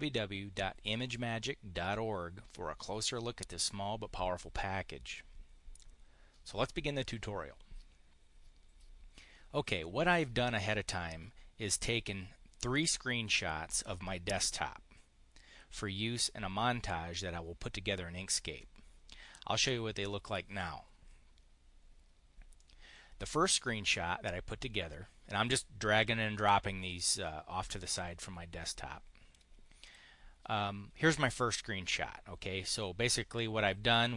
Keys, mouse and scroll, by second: 22.4 click, 28.0-29.3 drag, 29.6 click.